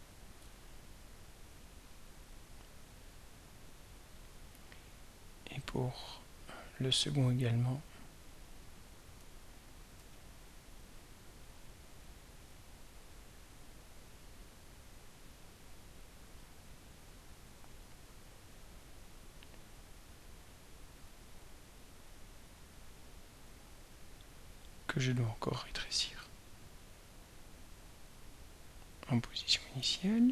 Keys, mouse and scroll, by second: 0.5 right click, 4.1 click, 5.6 click, 8.6-15.0 drag, 20.0 right click, 21.3 drag, 26.2 ctrl+a, 28.8 click.